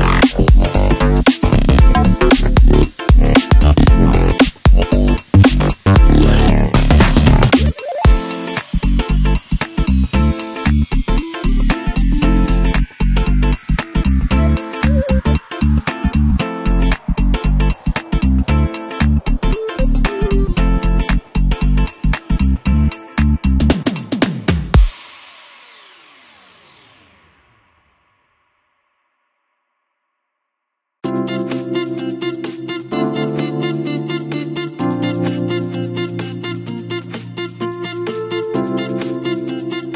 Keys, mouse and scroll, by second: 2.2-4.7 drag, 4.7-7.5 middle drag, 7.5-8.2 scroll up 1, 8.2-10.2 middle drag, 10.2 shift+click, 13.6 shift+click, 14.1 shift+click, 14.5 shift+click, 15.2 shift+click, 15.7 shift+click, 16.1 shift+click, 16.5 shift+click, 17.0 shift+click, 17.5 shift+click, 18.1 shift+click, 18.8 shift+click, 19.5 shift+click, 20.7 shift+click, 21.4 shift+click, 22.2-23.9 middle drag, 23.9-26.9 drag, 29.5-29.8 scroll down 1, 31.1 click, 32.4-35.4 drag, 36.3 click, 38.0-38.5 scroll down 2, 38.5 scroll up 2.